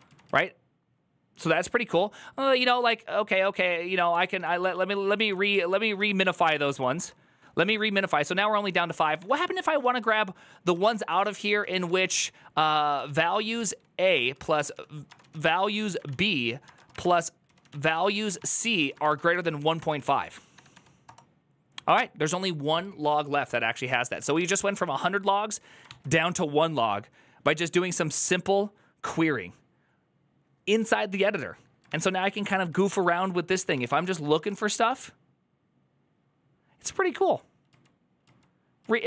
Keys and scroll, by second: 4.4-6.3 typing, 6.8 Return, 7.5 ctrl+c, 8.7-9.5 typing, 9.6 Left, 9.9 Right, 10.5-21.3 typing, 23.9-24.6 typing, 25.6 ctrl+c, 31.7 ctrl+c, 31.8-34.7 typing.